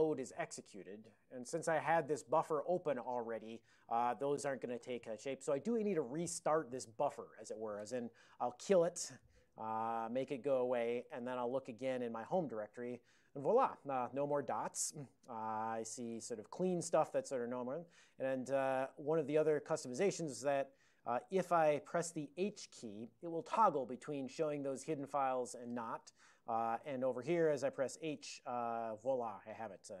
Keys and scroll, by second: 8.6 ctrl+x, 9.1 k, 11.2 ctrl+x, 11.5 d, 12.3 Return, 14.4 ctrl+n, 14.6 ctrl+n, 14.8 ctrl+n, 14.9 ctrl+n, 15.8 ctrl+n, 17.6 ctrl+p, 17.8 ctrl+p, 18.0 ctrl+p, 26.8 super+j, 29.1 ctrl+p, 29.3 ctrl+p, 29.4 ctrl+p, 29.6 ctrl+p.